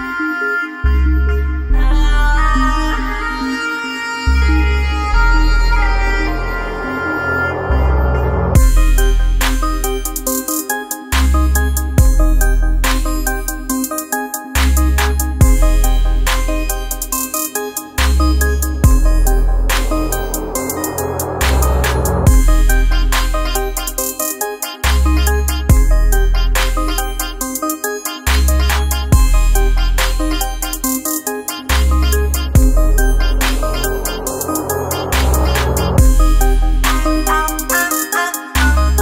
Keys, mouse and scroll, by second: 1.0 click, 1.8 space, 1.8 click, 2.3 space, 3.1 click, 4.1 right click, 5.3 click, 8.1 space, 8.2 click, 8.6 space, 9.3-11.3 drag, 11.3-21.2 drag, 21.2-22.8 drag, 22.8 F7, 25.1-32.1 drag, 35.1 shift+click.